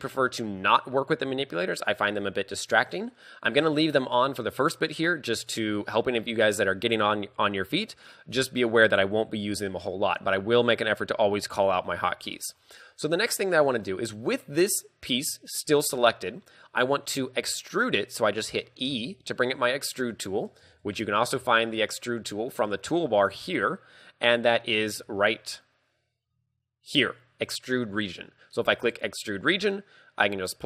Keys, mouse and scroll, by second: 13.9 middle click, 15.9 KP_3, 18.9 e, 20.6 right click, 20.7 ctrl+z, 21.4 t, 26.3 scroll up 4, 28.9 click, 28.9 scroll up 2.